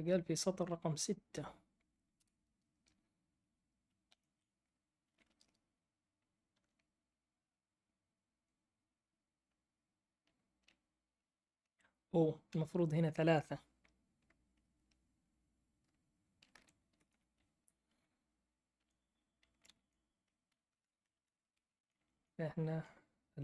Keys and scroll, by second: 2.1 shift+Return, 3.7-5.5 typing, 6.5 Right, 11.3-12.5 Right, 16.5 i, 16.9 BackSpace, 17.1 3, 18.7 Down, 19.6 Left, 19.6 Left, 19.8 Left, 20.6 Right, 21.1 BackSpace, 21.2 3, 21.7 Down, 21.9 Down, 22.1 Down.